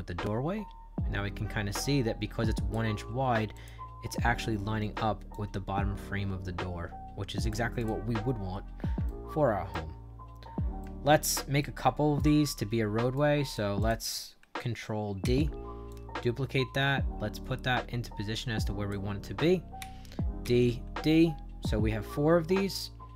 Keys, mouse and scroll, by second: 3.1-3.5 scroll up 2, 3.5 click, 3.5 scroll down 2, 3.9 middle click, 4.3 middle click, 5.2-7.4 drag, 7.7 click, 8.1 middle click, 8.5 middle click, 9.0 shift+right click, 9.9 middle click, 10.7 shift+right click, 11.5 right click, 12.4 shift+right click, 13.4 click, 13.7 click, 15.1 ctrl+d, 15.8-18.8 drag, 19.7 ctrl+d, 20.3 ctrl+d.